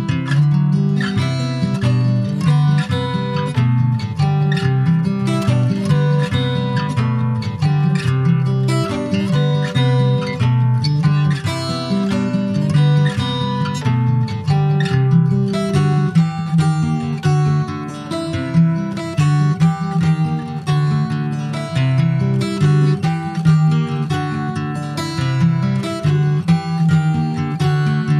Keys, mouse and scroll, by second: 0.8 click, 1.5-2.8 middle drag, 2.8 click, 6.3 click, 6.5-7.4 scroll down 6, 7.1 click, 7.4 middle click, 7.5-7.9 scroll up 3, 7.9 ctrl+s, 8.2-8.8 scroll up 2, 8.8 click, 9.8 alt+middle click, 10.6 middle click, 11.0 Tab, 11.6-12.8 scroll up 2, 12.8 a, 13.0-13.5 scroll up 3, 13.5 middle click, 14.1 e, 14.5 s, 16.5 alt+s, 21.1 Tab, 21.3 click, 21.7 click, 21.9-23.7 right drag, 23.7 click, 24.0 click, 24.8 click, 25.0-25.3 scroll down 3, 25.3 ctrl+s, 25.6 alt+middle click, 26.2 alt+middle click, 26.9 shift+middle click, 27.5 s.